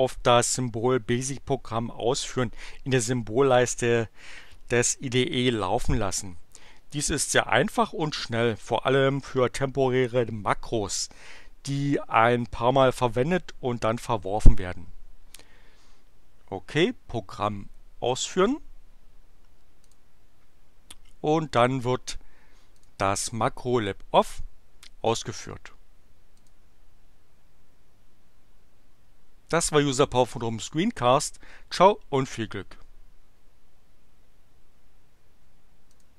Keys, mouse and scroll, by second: 18.3 click, 19.8 click, 22.8 click, 26.3 click, 35.7 click.